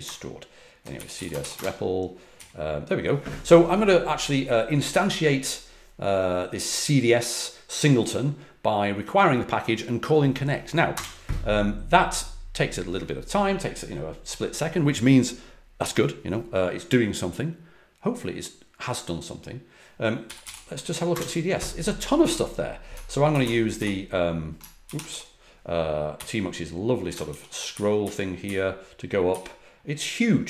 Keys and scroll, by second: 0.0-1.8 typing, 10.9 typing, 20.0-21.1 typing, 23.3 ctrl+a, 23.7 ], 24.8 ctrl+a, 25.0-26.9 typing, 27.2 ctrl+b, 27.7 ctrl+b, 28.0 ctrl+b.